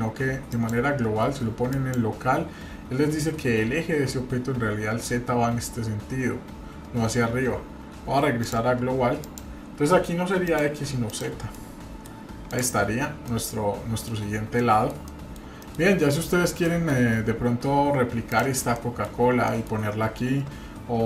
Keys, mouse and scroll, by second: 0.5-2.8 drag, 8.4-9.6 drag, 10.4 click, 11.1 click, 11.5 middle click, 12.5 click, 13.0 scroll down 1, 13.3 middle click, 14.2 scroll up 1, 14.6 shift+middle click, 15.6 shift+middle click, 16.3-17.4 scroll up 3, 16.7 shift+middle click, 17.5-18.2 scroll down 1, 18.2 click, 18.7 middle click, 19.2 scroll up 1, 19.4 middle click.